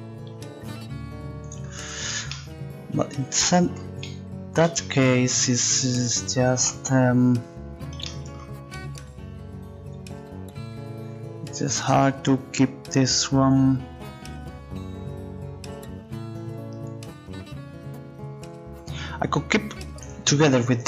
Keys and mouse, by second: 2.4 click, 5.7-6.9 middle drag, 14.3 middle click, 20.0-20.8 right drag.